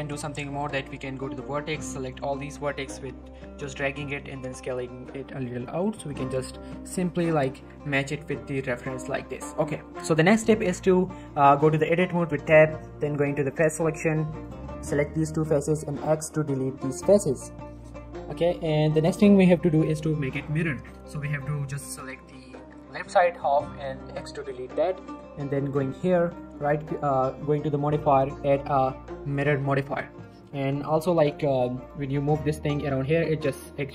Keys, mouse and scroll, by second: 0.5-2.3 drag, 4.1 s, 5.8 click, 6.2 shift+middle click, 7.3 z, 7.6 Tab, 7.9-8.3 scroll down 1, 8.3-9.3 middle drag, 10.5 Tab, 13.6 middle click, 13.7 scroll up 1, 14.4 shift+click, 14.8-15.3 shift+middle click, 15.8 x, 16.3 x, 17.2 click, 17.6-18.4 middle drag, 20.3-20.8 scroll up 1, 20.8 z, 21.4-21.7 scroll down 1, 21.7-23.0 drag, 23.4-24.3 typing, 24.4 middle click, 24.7 Tab, 25.6 click, 29.3 click, 29.7 scroll down 1, 29.8 middle click, 30.1 scroll up 1, 30.2 middle click, 30.9 Tab, 31.8 click, 32.9 g.